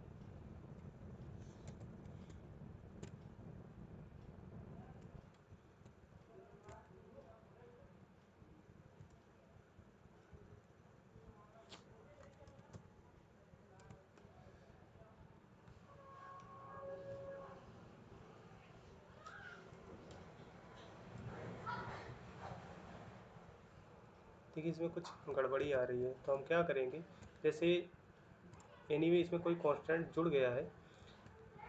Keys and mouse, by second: 1.4 ctrl+z, 2.1 shift+middle click, 3.0 ctrl+middle click, 6.5 ctrl+middle click, 12.4 Return, 12.4 typing, 13.8 ctrl+middle click, 15.3 ctrl+middle click, 22.0 Return, 26.2 shift+middle click, 27.0 ctrl+middle click, 31.1 ctrl+middle click.